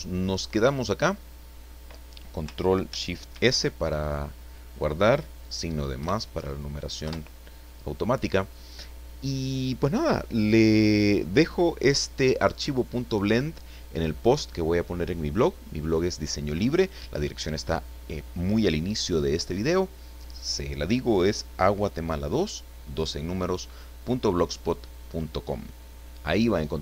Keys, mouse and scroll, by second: 0.5-1.9 middle drag, 3.3 ctrl+shift+s, 6.0 KP_Add, 7.0 KP_Enter.